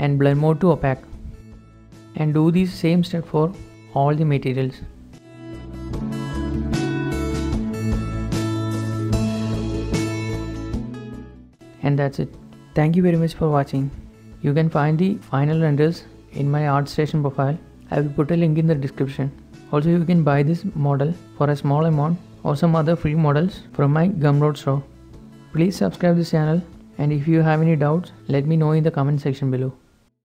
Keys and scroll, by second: 3.6 Return, 3.6 typing, 4.8-5.4 typing, 4.9 Return, 5.4 Return, 6.9 Return, 6.9 0, 7.4 h, 7.6 h, 8.7 shift+0, 8.7 alt+h, 10.0 shift+space, 10.5 shift+space, 12.7 ctrl+space, 14.1 shift+space, 16.9-19.1 typing, 17.1 Return, 17.7 Return, 20.4 shift+space, 20.4 0, 20.4 Return, 20.5 Tab, 20.6 Tab, 20.7 1, 21.8 shift+space.